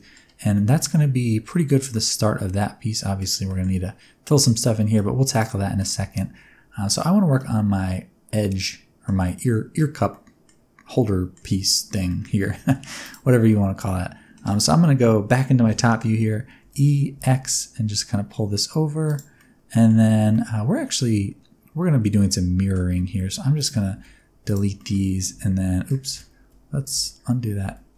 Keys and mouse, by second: 0.5 shift+middle click, 0.7-3.1 middle drag, 3.4 middle click, 4.4 middle click, 5.2 click, 5.7 shift+middle click, 6.1 middle click, 7.3-9.0 middle drag, 9.1 middle click, 10.0 middle click, 11.0 middle click, 11.5 Tab, 12.0 middle click, 12.5 1, 13.4 middle click, 15.6 KP_7, 16.5 e, 17.1 x, 19.0 click, 19.4 middle click, 20.3-22.7 middle drag, 23.0 3, 23.5 alt+click, 23.9 x, 24.7 middle click, 25.2 alt+a, 26.0 ctrl+z, 26.3 x, 26.9 ctrl+z, 27.6 x.